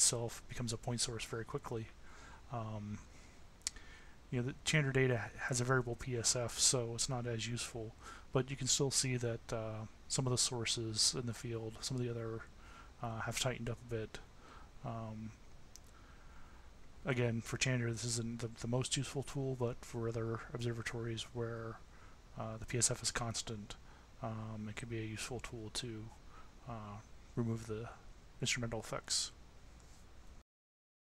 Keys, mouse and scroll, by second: 2.6 click, 4.3 Tab, 5.0 Tab, 7.4 Tab, 9.4 Tab, 15.2 Tab.